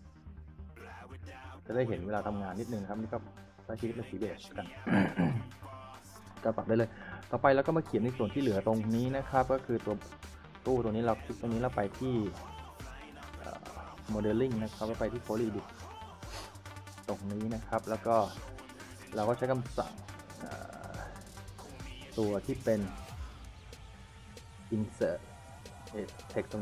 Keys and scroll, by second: 6.2 s, 6.4 w, 7.5 Escape, 8.1-10.6 typing, 17.8 s.